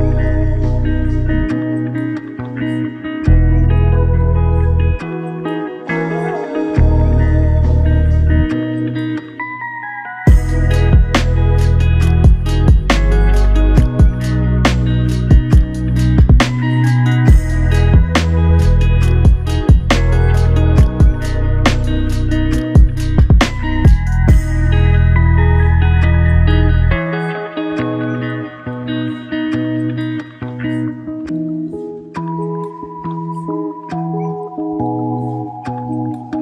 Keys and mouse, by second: 0.0 shift+click, 0.3 shift+double click, 0.6 shift+click, 4.3 shift+l, 5.8 shift+click, 8.9 shift+click, 13.1 shift+click, 17.4 shift+click, 19.2 ctrl+alt+click, 21.4 typing, 23.0 ctrl+alt+click, 24.7 double click, 31.5 typing, 32.4 ctrl+alt+click, 34.1 double click.